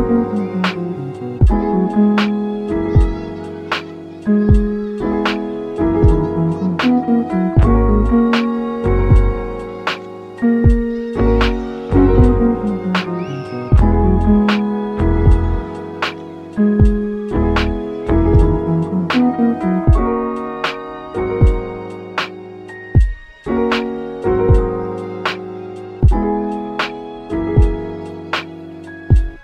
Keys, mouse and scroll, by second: 0.2 click, 0.5-1.0 scroll up 2, 1.0-2.8 shift+middle drag, 2.8 Tab, 3.2-3.6 middle drag, 3.6 ctrl+r, 5.0 middle click, 5.9 s, 11.1 Tab, 11.5 s, 12.5 middle click, 13.1-13.8 right drag, 13.8-16.1 middle drag, 16.1 s, 16.7 s, 17.4-20.4 middle drag, 21.8 s, 24.0-24.8 middle drag, 24.8 click, 25.4 shift+a, 28.2-28.8 middle drag, 28.8 g.